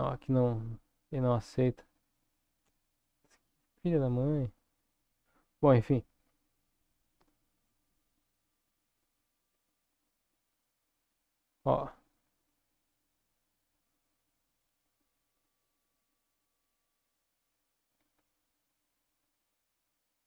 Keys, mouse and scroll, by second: 9.6 click, 10.3 click, 10.9 click, 11.8-14.3 drag, 15.5-17.2 drag, 18.0 Tab, 19.2-19.7 scroll up 3.